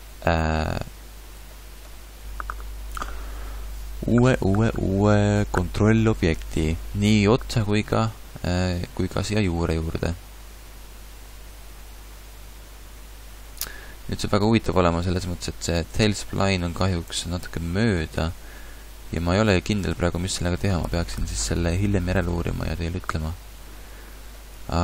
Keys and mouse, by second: 14.4-15.8 middle drag, 17.1 Tab.